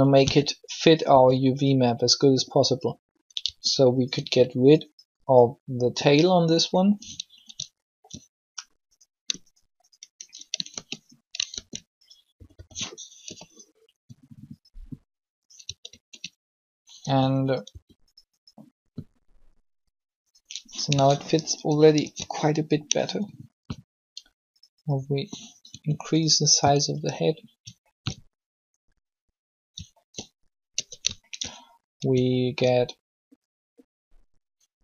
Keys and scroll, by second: 0.3 r, 1.0 s, 3.3 s, 4.1 r, 10.5 ctrl+shift+e, 11.2 ctrl+e, 12.5-13.2 typing, 15.7 ctrl+a, 17.0 r, 17.7 s, 22.0 ctrl+l, 23.5 s, 25.7 r, 30.7 alt+shift+Tab.